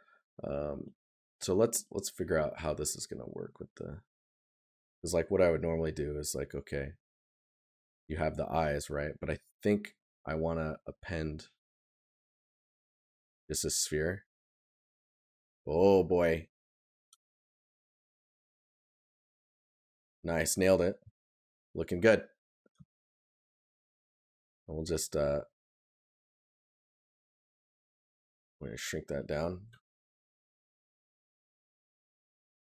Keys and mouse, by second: 14.9 right click, 18.6 right click, 26.6 right click, 29.7 right click.